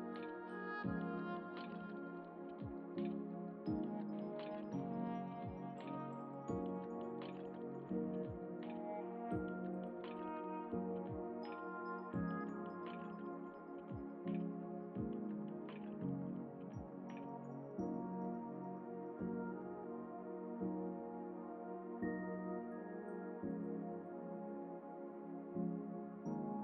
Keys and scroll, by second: 0.5 Return, 5.1 ctrl+t, 12.5 Return.